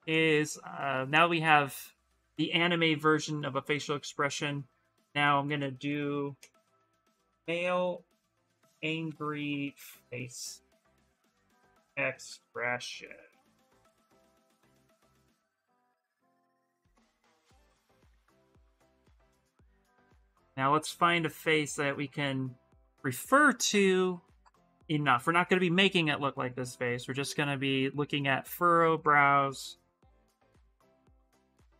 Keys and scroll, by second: 6.7-13.6 typing.